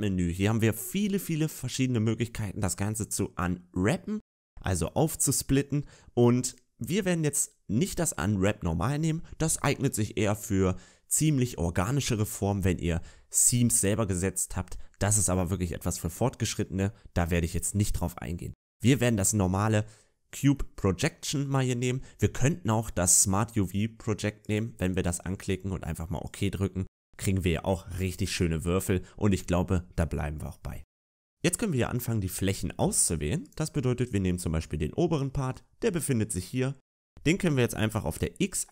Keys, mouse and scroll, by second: 30.8 middle click, 31.1-33.3 scroll up 1, 33.3 right click.